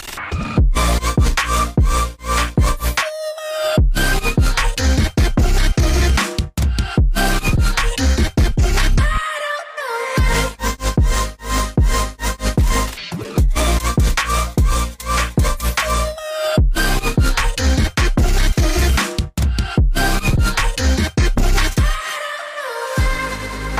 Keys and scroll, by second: 7.2 shift+Tab, 7.6 shift+Tab, 7.9 shift+Tab, 9.6-10.1 typing, 11.7 Tab, 14.0-14.8 typing.